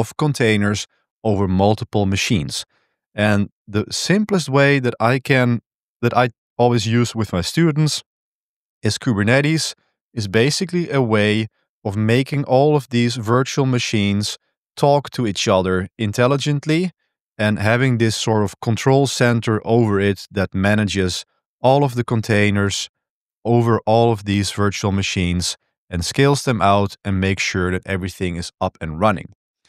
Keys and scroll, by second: 2.7 super+1.